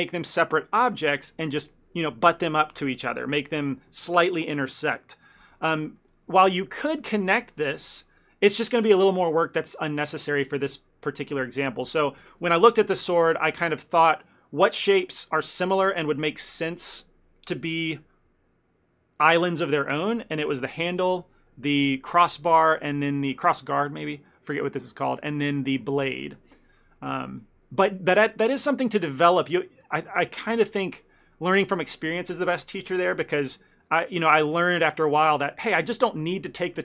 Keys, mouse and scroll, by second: 6.1 middle click, 6.4 shift+middle click, 6.7 ctrl+middle click, 12.0 ctrl+middle click, 12.4 middle click, 12.6 ctrl+middle click, 12.9 middle click, 13.6 ctrl+middle click, 13.9 shift+middle click, 25.3 middle click, 27.5-27.9 scroll up 3, 27.9 middle click, 28.9 shift+middle click, 29.5 ctrl+middle click, 29.9 shift+middle click, 30.7 ctrl+middle click, 34.0 middle click, 34.3 shift+middle click, 34.6 ctrl+middle click.